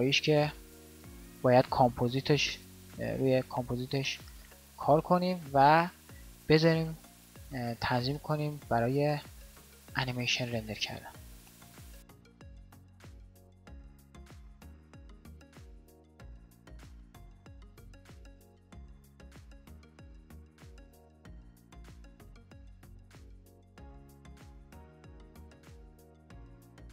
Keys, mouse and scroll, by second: 13.1 alt+a, 16.4 KP_5.